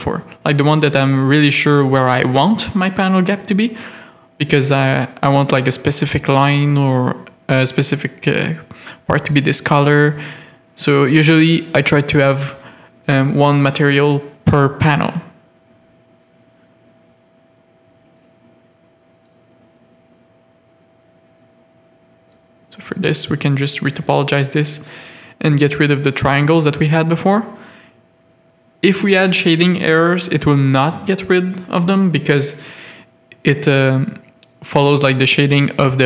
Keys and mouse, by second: 1.3 click, 2.0 ctrl+click, 3.3 ctrl+click, 3.8 c, 7.7 alt+shift+click, 10.2 z, 10.7 middle click, 12.9 alt+shift+click, 14.2 z, 14.6 click, 15.5 Tab, 15.7 alt+a, 16.2 middle click, 17.0 z, 17.3 middle click, 18.2 Tab, 18.4 a, 18.6 click, 19.0 1, 19.6 shift+middle click, 21.3 click, 25.1 g, 25.9 a, 27.5 alt+click, 28.1 g, 29.0 a, 31.2 g, 32.1 a, 33.8 middle click, 34.6 middle click.